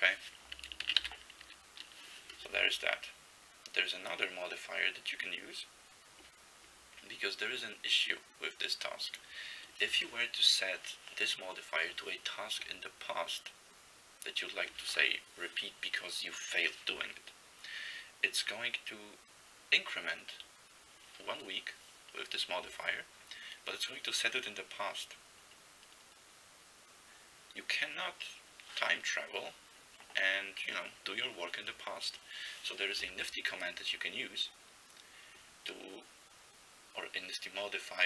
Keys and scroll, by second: 0.9 ctrl+x, 1.0 k.